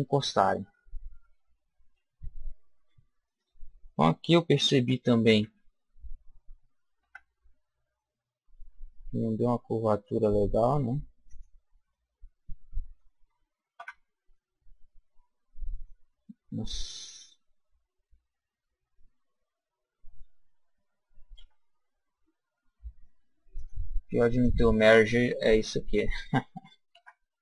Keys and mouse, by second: 2.2 KP_1, 2.7 KP_7, 5.4 s, 11.4 click, 11.9-13.1 middle drag, 13.8 Tab, 15.0 middle click, 15.2 middle click, 15.8 middle click, 17.3-19.2 middle drag, 21.4 KP_1, 23.6 click, 26.9 Tab.